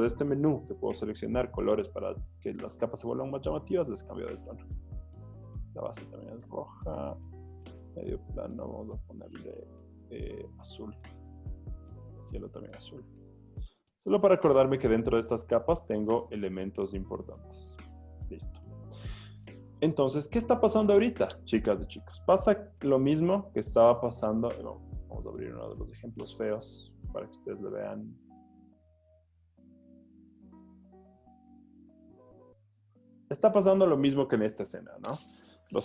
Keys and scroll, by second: 20.0 z, 29.3 Tab, 30.6 Right, 30.6 Down, 31.1 Down, 31.3 space.